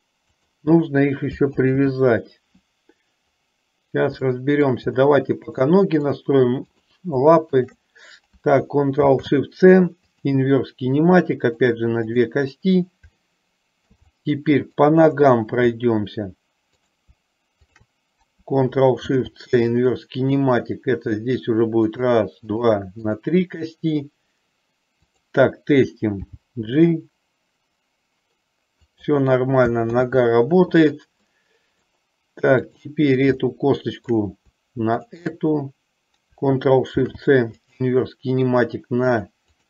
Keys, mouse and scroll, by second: 1.7 ctrl+z, 4.4-4.9 shift+middle drag, 5.8 middle click, 6.8 click, 7.8 shift+click, 9.2 ctrl+shift+c, 11.7 click, 13.4-14.1 shift+middle drag, 14.3-15.1 middle drag, 19.1 ctrl+shift+c, 22.1 click, 22.8 click, 23.3 click, 26.4 g, 30.1 ctrl+z, 31.4-32.2 middle drag, 32.7 click, 33.6 shift+middle click, 35.3 shift+click, 37.1 ctrl+shift+c, 39.2 click.